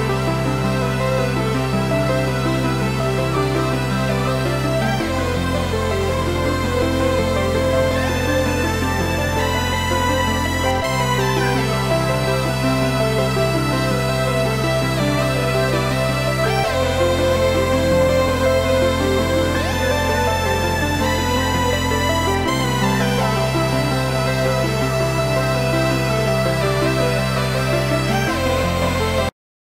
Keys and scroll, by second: 1.9 F5, 18.1 Escape.